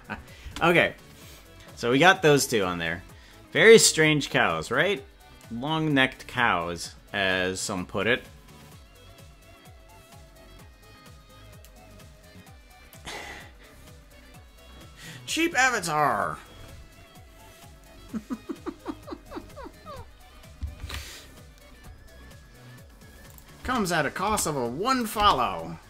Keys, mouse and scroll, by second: 0.4 space, 22.8 ctrl+s, 23.3 click, 23.6 space, 24.4 space, 24.9 click, 25.2 space.